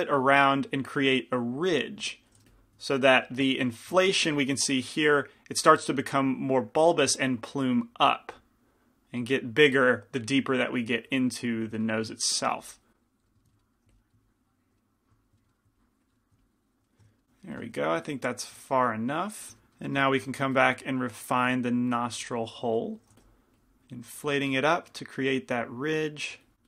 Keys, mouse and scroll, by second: 0.4-3.8 middle drag, 2.5 f, 4.1 z, 11.8 z, 12.8 click, 13.9 f, 14.3 click, 15.3-17.3 drag, 17.1 z, 17.8 z, 19.5 ctrl+z, 20.6 f, 21.8-26.6 drag, 23.3 f.